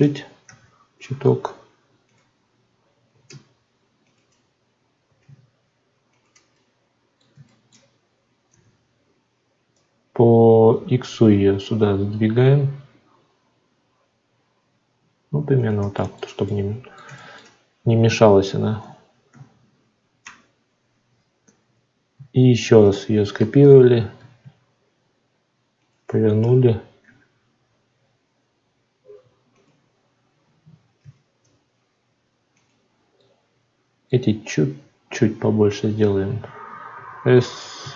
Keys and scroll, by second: 22.5 shift+d.